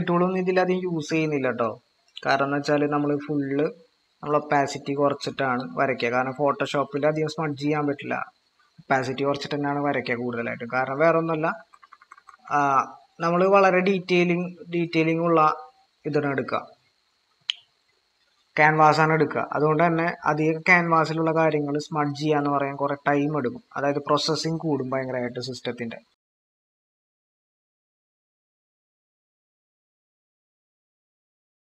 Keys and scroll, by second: 11.6-12.4 typing.